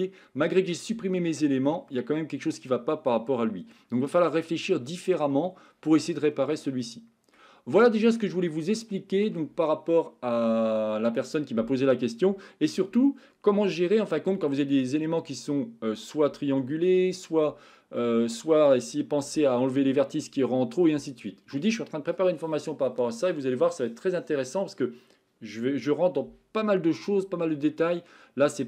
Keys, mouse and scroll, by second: 1.1-1.7 shift+middle drag, 2.0-2.6 middle drag, 4.1-5.2 middle drag, 6.0-6.6 shift+middle drag, 6.8-7.4 middle drag, 7.7 middle click, 8.7-9.2 shift+middle drag, 28.1-28.6 middle drag.